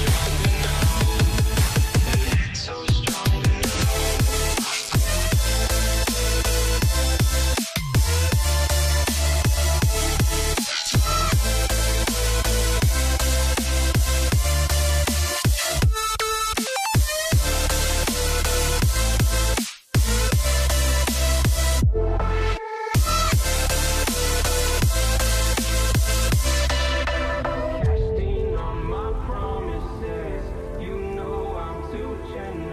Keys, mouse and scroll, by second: 2.3 double click, 3.4 typing, 4.9 click, 5.8 typing, 7.2 Return, 7.6-8.1 typing, 11.6 typing, 11.9 alt+right click, 13.8 double click, 15.3 ctrl+z, 15.7 ctrl+z, 19.8 double click, 22.4 alt+scroll down 1, 22.5-22.8 alt+scroll up 1, 22.8 alt+scroll down 1, 25.8 ctrl+t, 27.9 Return, 28.8 ctrl+t, 29.6 ctrl+click, 30.8 Return, 31.2 typing, 32.4 right click.